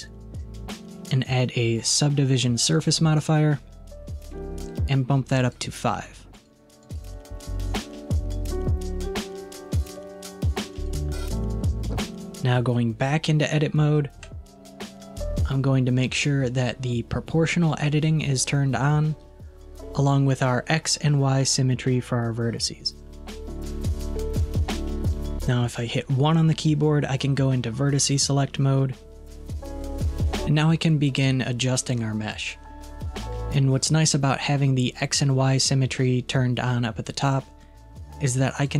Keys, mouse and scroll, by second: 5.4-9.9 drag, 10.8-13.9 drag, 14.2 Tab, 24.0-25.3 middle drag, 38.6 click.